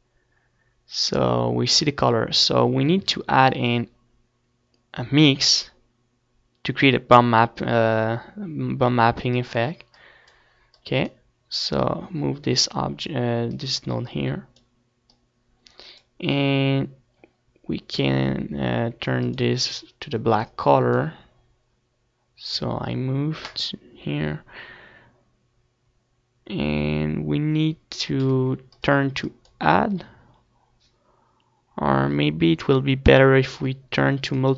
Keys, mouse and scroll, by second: 1.2 click, 2.3-4.6 drag, 4.8-6.7 middle drag, 7.7 middle click, 8.5 shift+a, 9.6 middle click, 15.2-18.6 drag, 18.7-21.7 drag, 23.9-25.6 drag, 26.2 middle click, 32.9-34.5 drag.